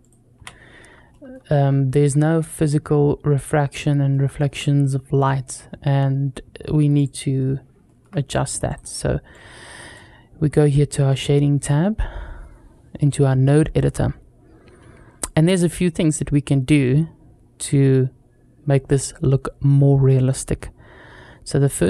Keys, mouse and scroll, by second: 0.2 n, 0.9 middle click, 1.4 scroll up 2, 1.8 middle click, 3.9-4.3 shift+middle drag, 5.7 scroll down 1, 6.8-7.5 drag, 7.7 shift+middle click, 8.5-9.0 drag, 9.1-10.4 drag, 10.4 middle click, 12.8 middle click, 15.0 middle click, 19.9-21.8 middle drag.